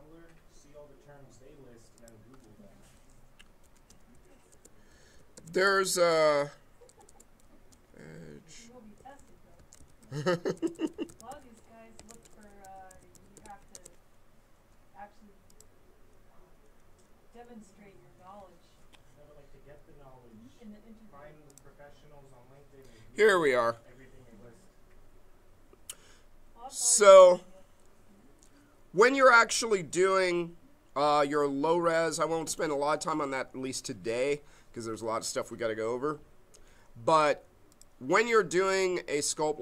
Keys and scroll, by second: 3.4-7.7 typing, 8.8-13.9 typing.